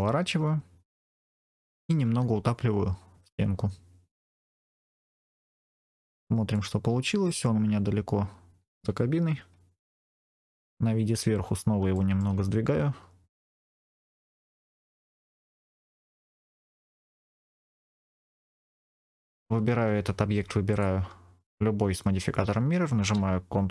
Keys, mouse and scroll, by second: 1.4 click, 1.9 g, 4.1 click, 5.1 middle click, 5.8-6.4 scroll down 1, 6.4 middle click, 10.1 KP_7, 11.3-11.7 scroll up 1, 11.8 shift+middle click, 13.6 g, 13.6 middle click, 14.4 click, 14.5 middle click, 15.2-15.5 scroll down 2, 15.4 middle click, 17.2 g, 17.3 x, 17.8 click, 18.3 g, 18.3 z, 18.6 click, 18.9 click, 19.0 middle click, 20.6 shift+click.